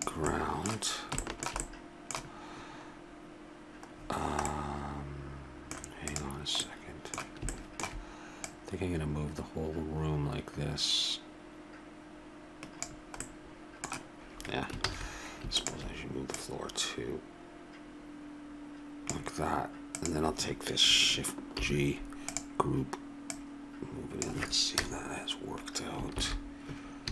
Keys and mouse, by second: 0.3-1.6 middle drag, 1.8-3.5 middle drag, 3.9 middle click, 4.2 middle click, 5.1 middle click, 6.1 right click, 6.8-8.9 drag, 8.9 middle click, 9.2-10.3 drag, 14.2 click, 14.8 ctrl+z, 15.5-18.2 drag, 19.9-21.5 drag, 21.5 shift+g, 23.3-24.8 drag, 24.8 KP_0, 26.4 shift+z.